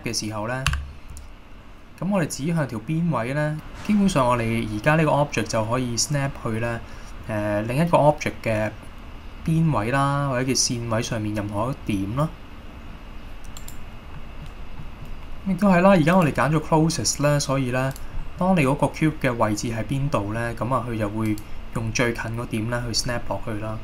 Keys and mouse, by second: 0.8 g, 13.7 right click, 14.3 middle click, 14.9 middle click, 16.3-17.5 drag, 18.3 middle click, 20.2 middle click, 21.4 click.